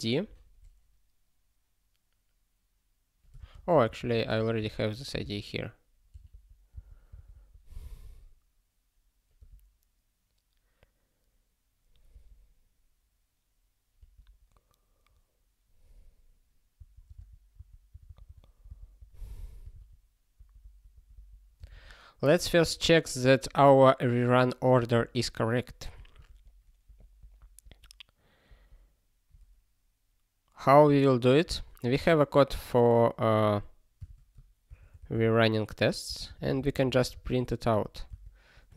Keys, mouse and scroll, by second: 3.4 ctrl+space, 3.6 ctrl+a, 3.9 ctrl+w, 4.0 ctrl+p, 4.2 ctrl+p, 4.6 ctrl+k, 4.8 ctrl+p, 5.1 ctrl+space, 5.2 ctrl+n, 6.1 ctrl+g, 6.3 ctrl+p, 6.7 Return, 7.4 ctrl+s, 7.5 ctrl+p, 7.7 ctrl+p, 9.4 ctrl+p, 12.1 ctrl+p, 16.7 ctrl+n, 17.1 ctrl+space, 17.1 ctrl+n, 17.6 ctrl+w, 17.9 ctrl+n, 18.1 ctrl+n, 18.3 ctrl+n, 18.7 Return, 18.9 ctrl+p, 19.2 ctrl+y, 19.8 ctrl+s, 20.3 ctrl+p, 20.6 ctrl+p, 20.9 ctrl+p, 21.1 ctrl+p, 21.6 ctrl+space, 21.6 ctrl+a, 25.8 ctrl+g, 26.8 super+b, 27.2 ctrl+g, 27.6 super+b, 28.4 ctrl+g, 31.4 super+b, 31.9 super+b, 34.0 super+b, 34.6 ctrl+s, 34.9 r, 36.1 Return, 36.2 ctrl+n, 36.4 ctrl+n, 37.7 ctrl+e, 38.0 Return.